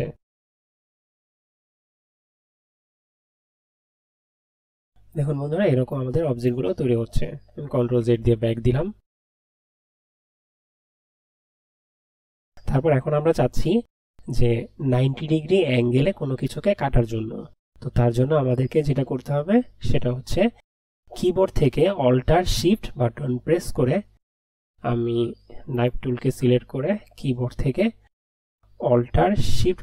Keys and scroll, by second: 8.1 ctrl+z.